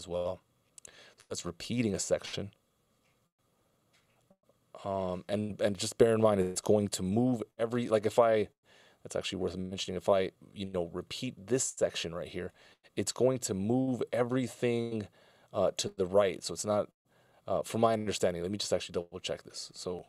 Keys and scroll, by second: 1.3 c.